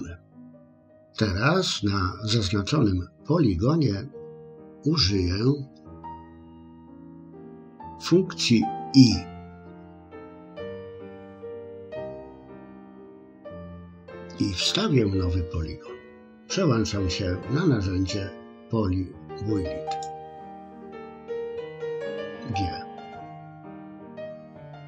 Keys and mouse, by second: 10.5 i, 22.1 g.